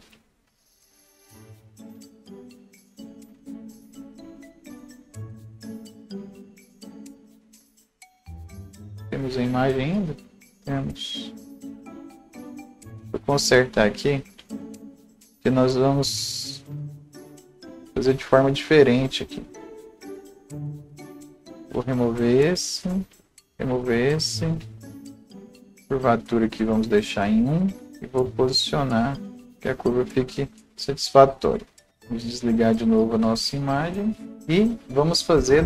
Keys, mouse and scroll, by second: 1.9 right click, 2.4 scroll down 1, 3.5-6.3 drag, 5.7-6.0 scroll down 1, 6.0-6.3 scroll up 1, 7.1-11.8 drag, 10.9-11.7 scroll up 1, 11.8-16.5 drag, 13.5 scroll up 1, 16.5-23.2 drag, 21.8 Delete, 23.5 Delete, 24.3 click, 25.5 c, 26.3-31.9 drag, 31.9-32.8 scroll down 1, 34.3 right click, 34.3 scroll down 1, 34.6 right click.